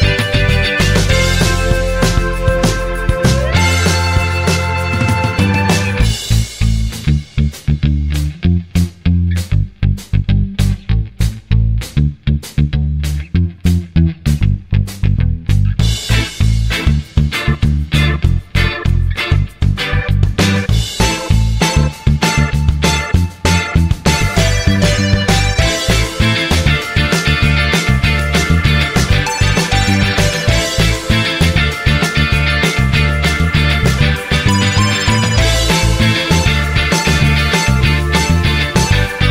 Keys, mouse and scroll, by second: 6.5 Escape, 9.5 Delete, 10.6 BackSpace, 10.8 BackSpace, 21.0 Return, 28.0 Escape, 33.3 0, 37.8 typing, 39.2 1.